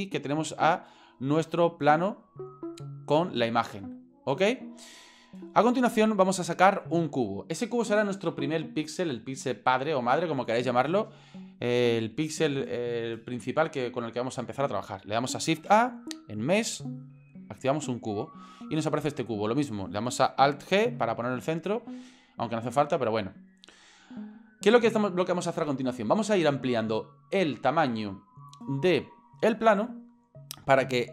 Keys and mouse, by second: 0.9-1.4 shift+middle drag, 2.3-3.2 middle drag, 4.7-6.2 middle drag, 15.5 shift+a, 20.7 alt+g.